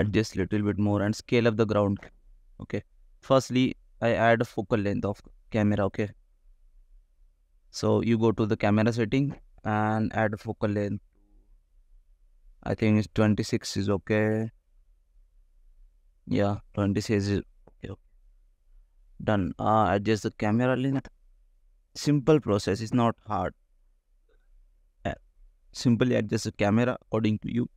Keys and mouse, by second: 0.4 click, 1.6 s, 4.3 click, 5.3 click, 6.6 click, 8.0 click, 9.0-13.6 drag, 19.4 g, 19.6 z, 21.0 click, 21.5 shift+click, 23.5 ctrl+click, 24.4 click, 26.0 n, 26.5 click, 26.7 n, 27.5 click.